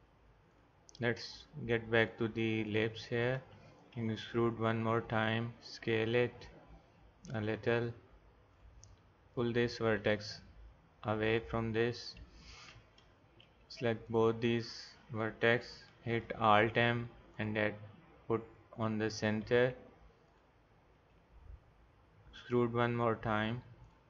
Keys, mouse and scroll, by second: 3.9 e, 4.4 click, 8.5-10.8 drag, 10.0 g, 12.5-14.1 drag, 15.9-17.5 drag, 16.2 alt+m, 18.8-20.2 drag, 19.4 g, 22.4 click.